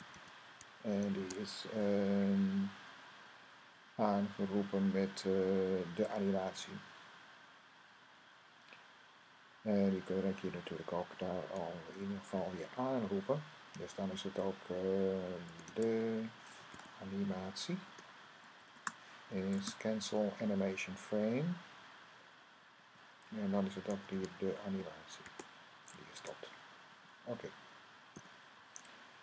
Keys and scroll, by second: 0.0-0.5 typing, 9.4 Left, 9.9-10.5 typing, 15.1-16.4 typing, 19.1 =, 20.5 Right, 20.7 Right, 21.0 Right, 21.1 Right, 21.2 Right, 21.3 Right, 21.4 Right, 21.5 Right, 24.0-25.5 Right, 26.6 Right, 27.9 ;.